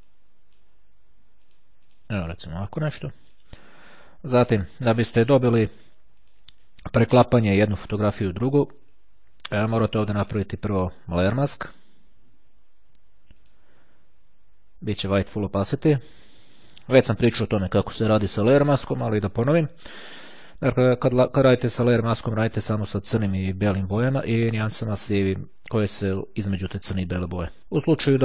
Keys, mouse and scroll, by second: 0.2 click, 1.5 click, 3.2-4.4 drag, 6.1 click, 6.7 click, 10.4 right click, 13.5 click, 15.4 click, 16.6 click, 25.6-27.9 drag.